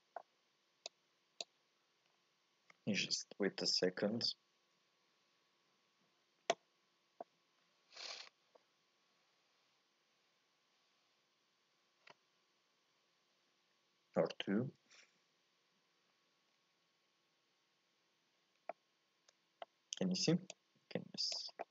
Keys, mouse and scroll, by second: 0.8 click, 2.1-3.2 scroll down 2, 3.2-16.8 scroll down 1, 18.9-20.6 middle drag, 20.6-21.7 drag.